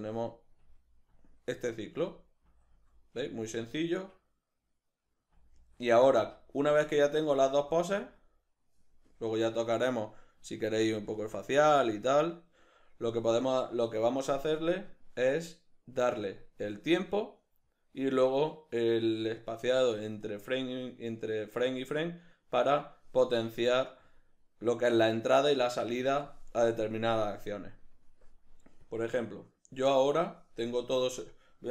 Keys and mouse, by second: 0.6 Left, 1.7 Right, 2.5 Left, 3.0 Left, 3.2 Right, 5.4 Left, 6.0 Right, 6.7 Left, 7.6 Right, 10.2-14.9 middle drag, 14.9-31.7 drag, 30.7 q.